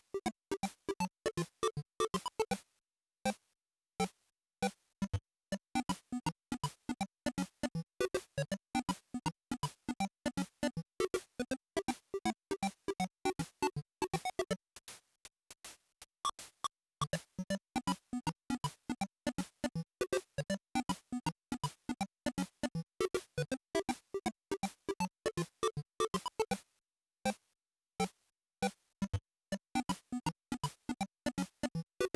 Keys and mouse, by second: 0.5-3.9 drag, 10.5 click, 16.2-18.5 drag, 25.9-27.3 drag, 27.9-29.5 drag.